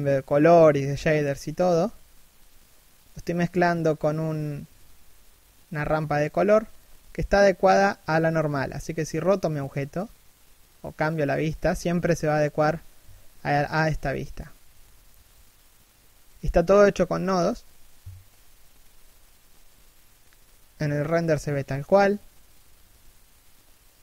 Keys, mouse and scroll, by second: 2.1 scroll down 1, 2.7 middle click, 3.4 scroll up 1, 4.1-4.4 scroll down 1, 4.8 scroll up 1, 5.3 r, 7.9 scroll down 1, 8.2 shift+middle click, 9.0 a, 11.3 0, 12.3 right click, 12.6 g, 13.5 r, 20.9 scroll up 1, 22.7 middle click, 23.2-23.5 scroll up 1, 23.5 middle click.